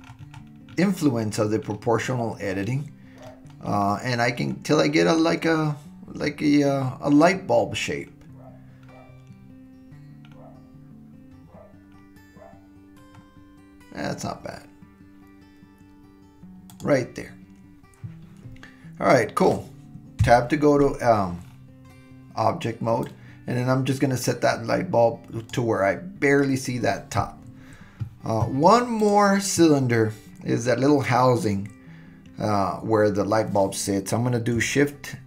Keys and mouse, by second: 20.2 Tab, 23.1-25.5 drag, 29.0 click.